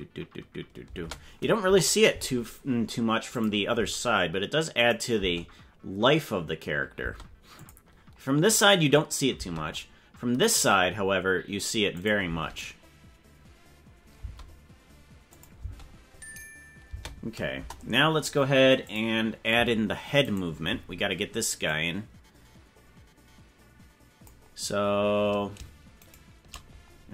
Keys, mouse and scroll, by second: 1.0 space, 1.6 KP_0, 3.3 click, 4.8 click, 5.1 space, 7.0 space, 7.6 click, 9.3 space, 11.9 click, 12.2 space, 14.2 space, 15.3 click, 15.5 space, 16.9 space, 17.5 KP_0, 18.8 click, 20.3 right click, 21.7-22.8 drag, 26.1 shift+right click.